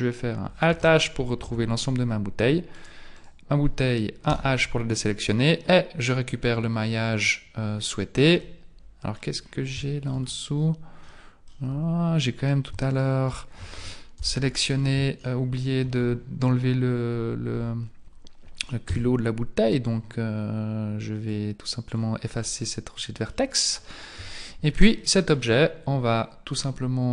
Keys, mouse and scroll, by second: 0.7 alt+h, 1.5 Tab, 2.8 right click, 3.2 right click, 4.3 h, 5.0 right click, 8.4 middle click, 9.8 shift+middle click, 10.3-11.1 scroll up 8, 11.1 middle click, 11.5 scroll down 1, 11.7 Tab, 12.9 shift+right click, 14.2 ctrl+l, 15.3 shift+middle click, 18.9 x, 21.9-22.4 scroll down 4, 22.4 middle click, 24.2 KP_1, 25.0 shift+middle click, 26.1-27.1 scroll down 2.